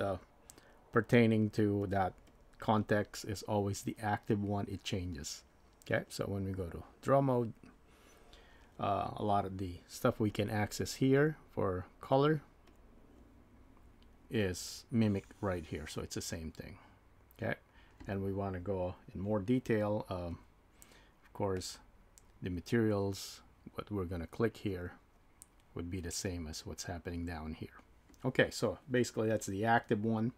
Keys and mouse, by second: 0.1 click, 1.0 click, 1.4 click, 1.9 click, 6.7 click, 10.3 click, 14.9 click, 24.7 click.